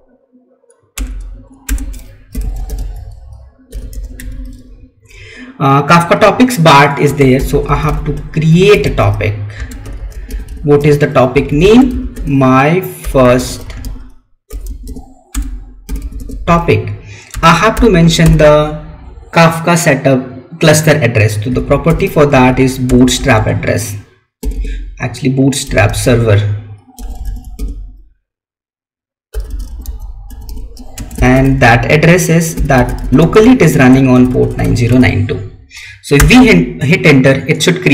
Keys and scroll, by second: 4.1 Tab, 7.2 space, 9.6 space, 17.2 space, 30.8 space.